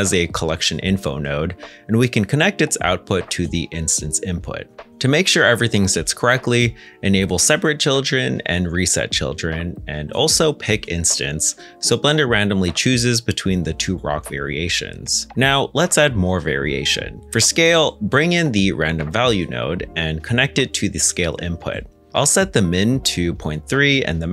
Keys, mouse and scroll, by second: 3.1 middle click, 15.2 middle click, 16.5-17.1 scroll down 1, 17.1 middle click, 17.7 scroll up 1, 19.2 r, 19.7 Return, 22.2 middle click, 23.5 ., 23.6 3, 23.7 Tab.